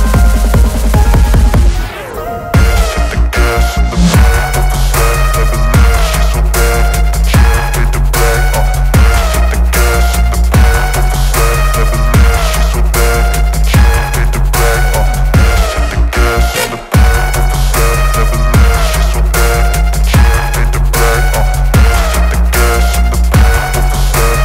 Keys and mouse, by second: 2.6 ctrl+space, 2.8 ctrl+alt+click, 4.6 click, 4.8 ctrl+space, 5.2 ctrl+alt+click, 5.8 click, 6.3 space, 6.4 click, 6.6 space, 6.9 ctrl+g, 8.4 ctrl+y, 9.6 ctrl+space, 9.7 ctrl+click, 9.9 ctrl+space, 10.5 ctrl+click, 10.6 ctrl+space, 11.5 shift+click, 13.4 ctrl+y, 13.6 click, 13.7 space, 13.8 ctrl+click, 15.4 ctrl+y, 15.8 click, 16.1 ctrl+y, 17.1-20.8 shift+drag, 20.8 alt+shift+click, 21.3 shift+z, 22.4 click, 22.8 ctrl+z, 23.8-24.4 drag.